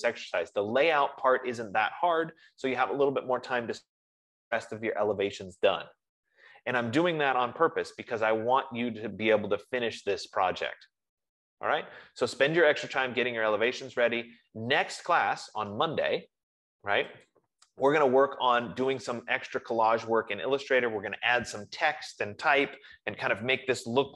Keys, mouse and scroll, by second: 17.6-22.6 drag.